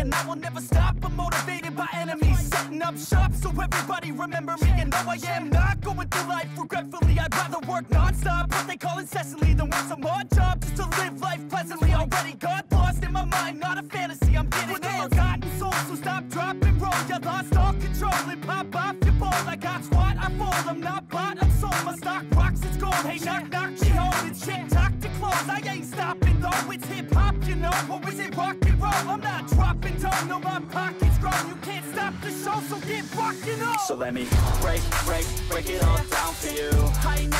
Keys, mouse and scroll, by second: 3.9 shift+click, 4.7 right click, 22.0 double click, 24.2 double click, 26.4 shift+1, 28.4-29.3 typing, 30.6 shift+1, 32.1 BackSpace, 32.4 1, 35.2 ctrl+c, 36.4 double click.